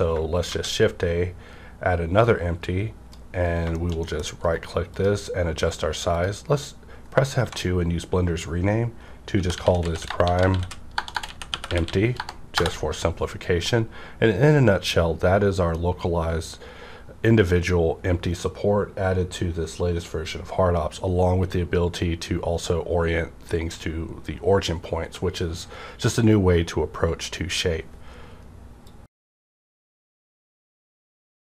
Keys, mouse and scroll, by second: 0.4 shift+a, 2.2-3.5 drag, 3.4 scroll down 1, 3.7 shift+middle click, 3.8 shift+scroll up 1, 4.2 scroll down 1, 4.4 right click, 4.8 click, 6.1 click, 7.3 F2, 9.3-11.8 typing, 12.5 Return.